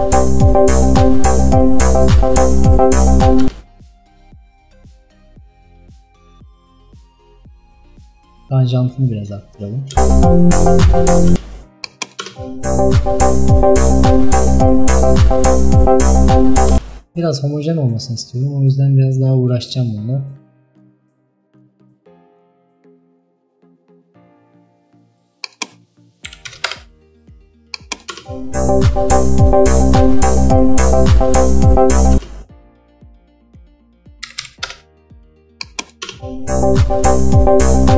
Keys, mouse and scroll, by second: 3.5 space, 7.7-10.0 drag, 10.0 space, 11.4 space, 11.9 click, 12.3 space, 16.8 space, 26.7-28.2 drag, 28.2 space, 32.2 space, 34.7-36.1 drag, 36.1 space.